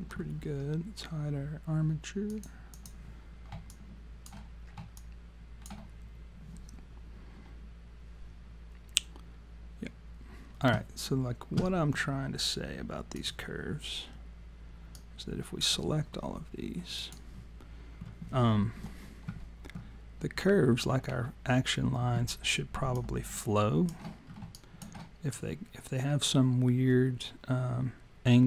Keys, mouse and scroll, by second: 2.3 click, 2.8 click, 3.7 alt+click, 5.0 alt+click, 13.2 click, 15.0 click, 17.0 click, 22.9 alt+click, 24.2-24.6 scroll down 2, 24.6 alt+click, 25.4 click.